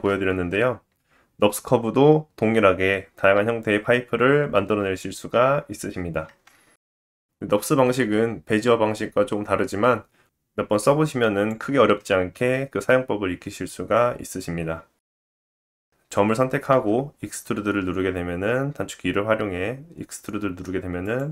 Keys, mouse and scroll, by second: 0.3 shift+a, 2.5-7.1 drag, 3.7 Tab, 7.1-10.8 middle drag, 10.8-21.2 drag, 21.2-21.3 middle drag.